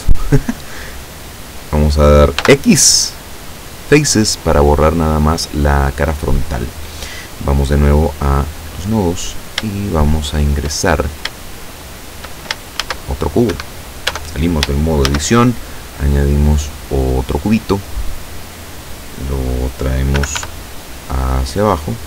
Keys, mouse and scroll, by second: 2.5 x, 3.9 click, 8.1 click, 9.9 shift+middle click, 10.9-11.3 shift+scroll down 3, 11.5 shift+middle click, 12.9 shift+a, 13.9 Escape, 14.1 Tab, 14.7 shift+Tab, 15.1 shift+a, 17.3 click, 20.2 g, 20.4 y, 21.9 click.